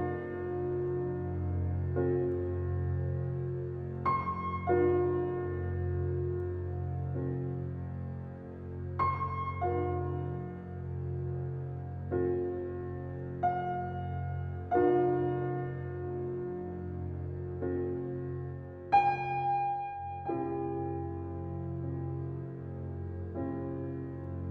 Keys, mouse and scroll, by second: 0.5 click, 1.2 alt+right click, 1.9 alt+middle click, 3.0 right click, 3.0 right click, 4.4 click, 6.9 right click, 7.6 click, 12.6 right click, 14.0 click, 18.8 BackSpace, 20.2 click, 23.4 BackSpace, 24.4 click.